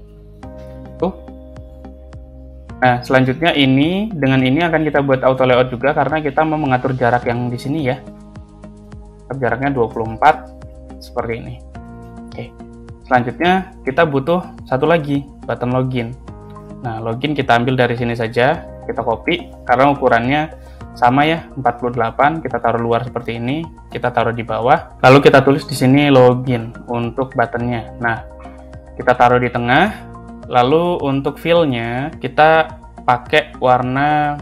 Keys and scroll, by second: 0.0-0.5 typing, 5.2 shift+a, 9.2 2, 9.8 Return, 18.4 ctrl+c, 18.8 ctrl+v, 23.9 Down, 25.1 o, 25.3 i, 25.5 n.